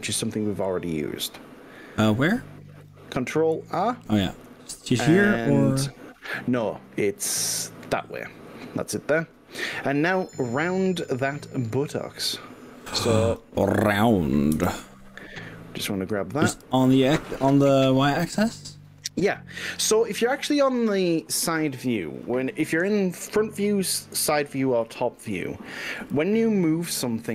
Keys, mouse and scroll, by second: 1.2 click, 1.8 click, 2.8 click, 3.8 ctrl+r, 9.2 click, 12.8-13.4 drag, 14.5 g, 16.6 y, 22.2 click, 24.4-24.8 drag, 25.8 g, 26.0 y.